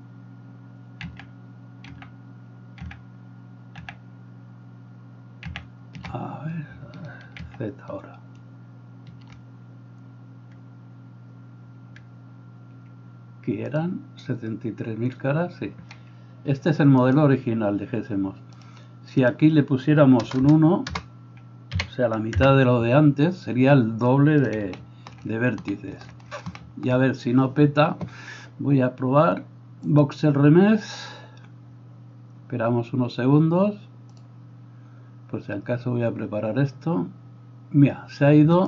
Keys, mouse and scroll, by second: 1.5 ctrl+z, 2.4 ctrl+z, 3.2 ctrl+z, 4.2 ctrl+z, 5.6 ctrl+z, 7.5 ctrl+z, 13.9-17.2 middle drag, 17.2-17.7 right drag, 17.7-18.7 middle drag, 18.7-38.6 drag, 20.4 BackSpace, 27.0-37.4 middle drag.